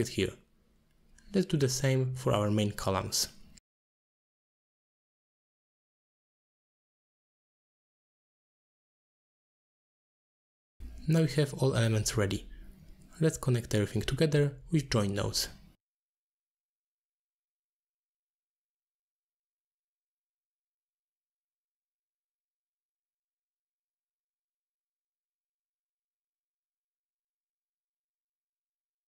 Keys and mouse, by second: 0.3-0.6 middle drag, 1.6-3.4 shift+drag, 3.7 click, 3.8 shift+d, 4.4 middle click, 4.8 middle click, 5.2 alt+shift+click, 6.5-8.0 drag, 8.2 alt+shift+click, 8.9 shift+click, 9.7 click, 10.0 middle click, 10.2 click, 10.6 alt+shift+click, 10.9 alt+shift+click, 11.3 click, 11.4-11.9 drag, 12.0 alt+shift+click, 12.3 drag, 12.8 middle click, 13.2 middle click, 13.4 middle click, 13.9 shift+click, 14.7 middle click, 14.9 middle click, 15.0 shift+middle click, 15.2 middle click, 15.6 middle click, 15.7 middle click, 15.8 middle click, 16.1 click, 16.2 g, 16.6 click, 16.8 click, 16.8 shift+d, 17.1 click, 17.3 click, 17.5 g, 17.7 middle click, 18.0-18.5 drag, 18.7 middle drag, 19.4 middle click, 20.9 middle click, 21.6-23.8 drag, 24.6 middle click, 25.4 middle click, 25.9 alt+shift+click, 26.5 middle drag, 26.9 middle click, 27.0 shift+click, 27.2 click, 27.9 shift+click, 28.4 middle click, 28.5 shift+middle click, 28.6 middle click.